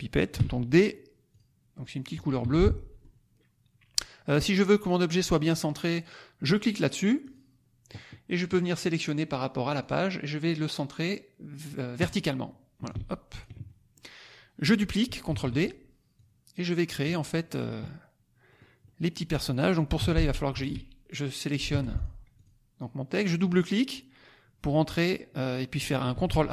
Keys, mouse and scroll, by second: 0.3 d, 1.2 click, 2.4 F1, 2.7 click, 2.8-3.1 scroll up 4, 2.9 click, 7.2 click, 8.4 click, 9.7 click, 11.9 click, 12.8 ctrl+click, 13.7 ctrl+middle click, 15.2 ctrl+d, 16.1 click, 17.1 middle click, 18.6 click, 18.8 click, 19.9 t, 20.5 ctrl+a, 21.6 F1, 21.9 click, 22.4 click, 23.2 click, 26.1 ctrl+a.